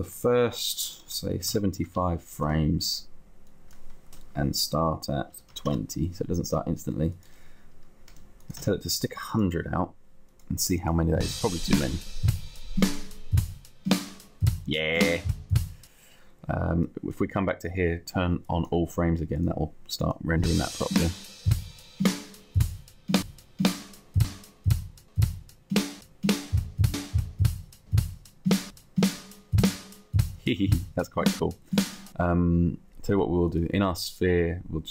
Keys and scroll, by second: 1.0 7, 1.7 Return, 5.9 Return, 8.5 0.